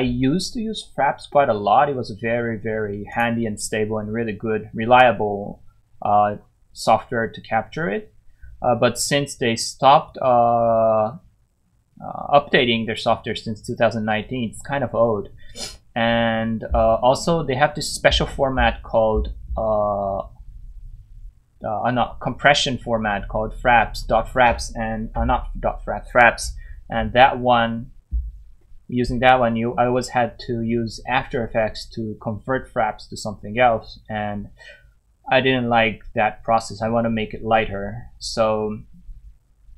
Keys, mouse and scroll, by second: 3.1 click, 4.4 scroll down 1, 5.6 scroll up 1.